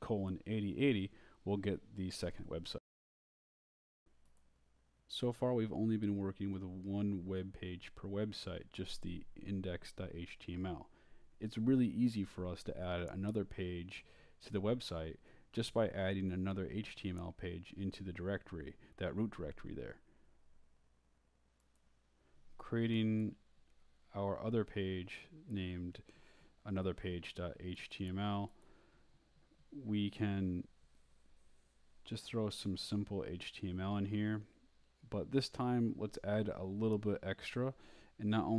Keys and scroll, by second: 0.4 BackSpace, 1.4-4.4 typing, 5.0 Return, 5.4-7.3 typing, 11.2-12.9 typing, 14.5-19.4 typing, 21.1 Return, 22.0 shift+Return, 22.5-28.9 typing, 26.1 shift+Return, 26.4 shift+Return, 29.1 shift+Up, 29.7 Down, 30.5 shift+Down, 31.3-38.5 typing.